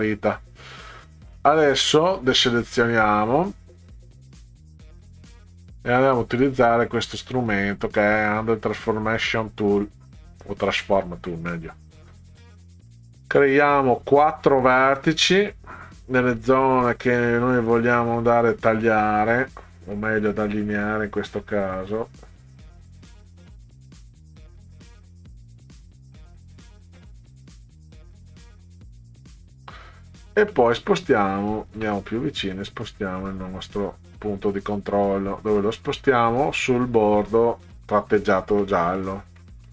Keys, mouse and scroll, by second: 2.7 click, 3.3 click, 4.4 click, 12.0 click, 12.9 middle click, 18.7 click, 22.7 click, 23.2 middle click, 26.6 click, 27.0 middle click, 29.0 click, 30.5 middle click, 31.3-31.7 ctrl+scroll up 4, 33.4-38.0 drag, 38.6 middle click, 39.4 middle click.